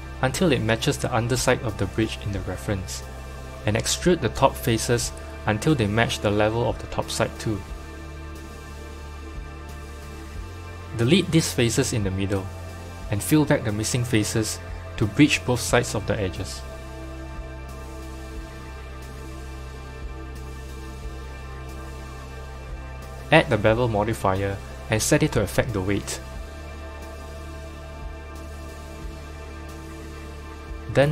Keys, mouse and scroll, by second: 0.0-0.5 scroll up 4, 0.5 g, 5.0 e, 8.2 middle click, 8.8-9.8 scroll down 2, 9.8 scroll down 1, 9.9 3, 10.4 click, 12.7 Delete, 14.5 click, 15.3 2, 15.5 click, 16.7 f, 17.4 click, 17.9 f, 18.4 click, 18.8 f, 20.0 Tab, 22.8 click, 23.7-26.9 drag, 28.2-28.8 middle drag, 28.8-29.2 scroll up 3, 29.2 Tab, 29.7 click, 29.8 click, 30.4 click, 31.0-31.1 middle drag.